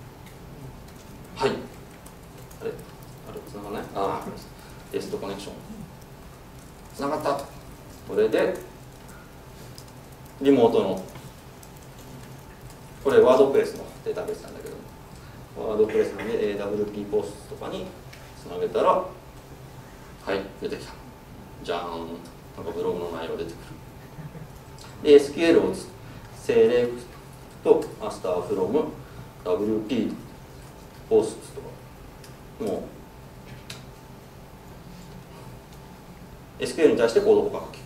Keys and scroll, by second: 18.0 F4, 25.1 ctrl+shift+super+F10, 32.7 Return.